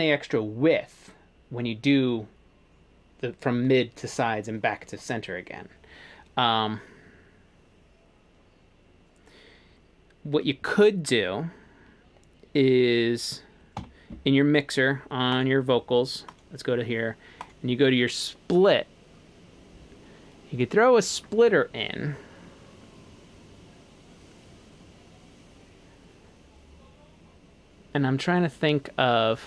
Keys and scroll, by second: 13.8 F3.